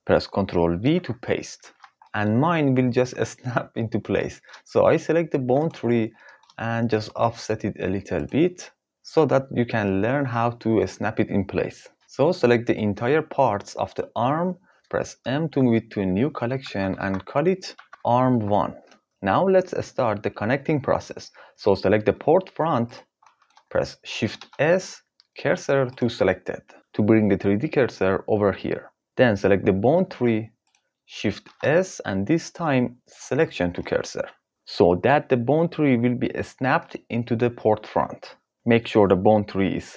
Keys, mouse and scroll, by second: 1.4 ctrl+v, 3.3 click, 5.1 click, 6.7 g, 9.4 middle click, 14.6 m, 22.4 click, 23.9 shift+s, 31.0 shift+s.